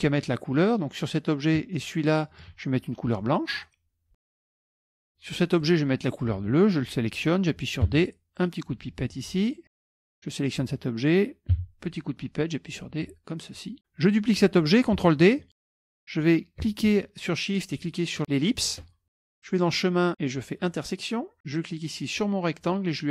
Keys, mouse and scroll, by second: 2.1 shift+click, 3.7 click, 4.3 KP_Subtract, 4.3-4.7 scroll down 2, 4.5 middle click, 4.8 KP_Subtract, 5.5-6.7 drag, 8.0 d, 8.4 click, 9.6 click, 10.0 F1, 10.1 click, 11.6 d, 12.8 click, 13.8 click, 15.6 ctrl+d, 17.7 shift+click, 19.5 click, 20.7 click, 21.6 click.